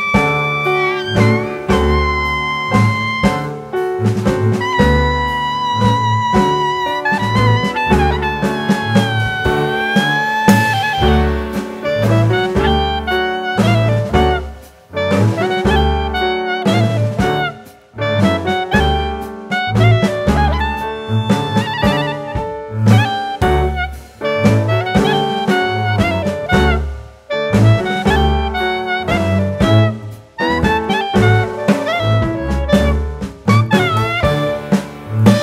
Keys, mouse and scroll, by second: 0.3 z, 2.6 s, 5.4 click, 6.9-7.8 scroll down 1, 7.8 click, 8.3 shift+middle click, 8.7-9.3 scroll up 2, 9.5 click, 11.0 shift+middle click, 13.3 Tab, 15.0 shift+d, 15.3 s, 16.0 click, 22.0 Tab, 22.4 click, 23.0 click, 24.0 click, 24.0 right click, 26.6 click, 29.0 click, 32.2 click.